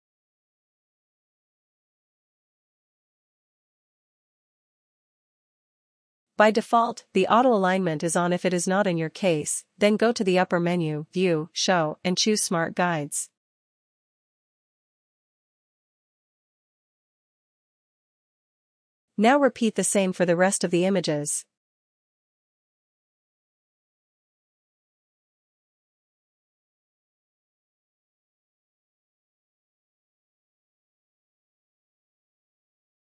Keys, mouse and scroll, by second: 2.6 ctrl+-, 2.9 ctrl+-, 7.4 click, 15.0 click, 23.1 click, 27.5 click, 29.4 ctrl+t.